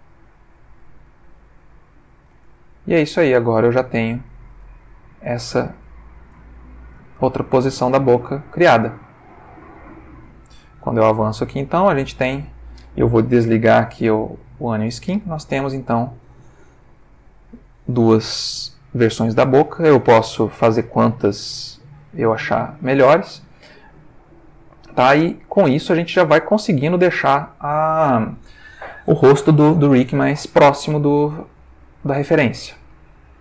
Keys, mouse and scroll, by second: 0.5 click, 1.0 click, 1.3 g, 1.9 click, 2.8 ctrl+middle click, 4.0 click, 4.6 g, 5.1 click, 5.4 Tab, 5.8-7.5 ctrl+middle drag, 8.4-10.3 drag, 11.0 Right, 11.7 Right, 12.4 Left, 14.2 click, 15.5 Right, 16.1 Left, 16.6 Right, 17.0 Left, 17.5 Right, 20.1 click, 20.6 click, 21.7 click, 22.3 ctrl+middle click, 23.5-26.3 middle drag, 26.4 ctrl+shift+middle click, 31.6-33.0 middle drag.